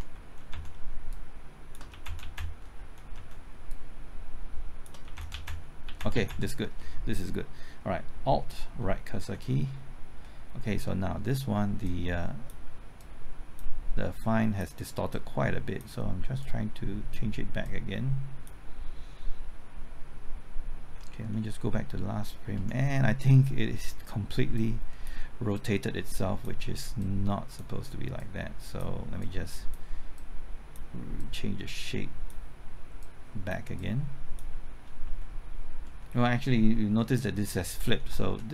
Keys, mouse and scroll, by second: 0.1 Left, 0.5-3.9 typing, 1.1 shift+click, 1.9 shift+Left, 2.0 Right, 3.6 shift+click, 5.0 shift+Left, 5.1 Right, 5.1-5.8 typing, 5.8 Left, 5.9 Right, 6.1 Left, 6.2 Right, 9.2 alt+Right, 11.8 click, 12.9 click, 14.1 click, 15.1 click, 16.4-17.4 drag, 17.4 click, 21.5 Left, 22.5 Right, 24.5 click, 28.1 click, 29.2 click, 30.1 click, 31.1-32.4 drag, 32.4 click, 33.7 click, 35.0 Left, 35.8 Right, 38.1-38.5 typing, 38.2 ctrl+z.